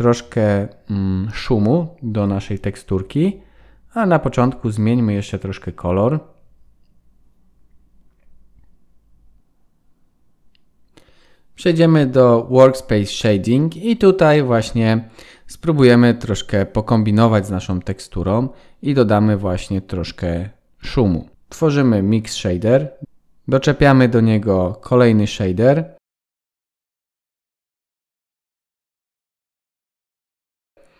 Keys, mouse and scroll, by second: 0.1 click, 7.1 ctrl+s, 8.0 F12, 9.4 ctrl+s.